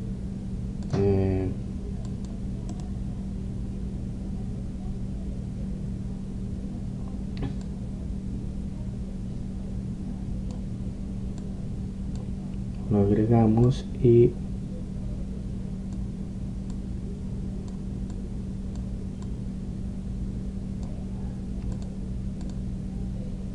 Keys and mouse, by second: 0.0 Escape, 1.0 click, 1.1 right click, 1.8 middle click, 1.9-6.2 drag, 6.2-8.7 middle drag, 8.7-10.4 drag, 10.4-12.5 middle drag, 12.5-16.7 drag, 17.8-23.1 drag.